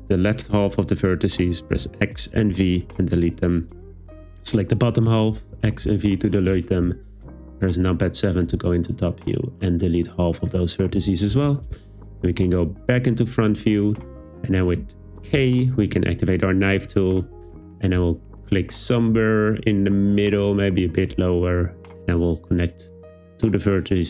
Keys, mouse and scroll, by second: 1.7 x, 5.5 x, 6.8 `, 10.9 x, 11.7 `, 15.3 k, 21.7 click, 23.5 click.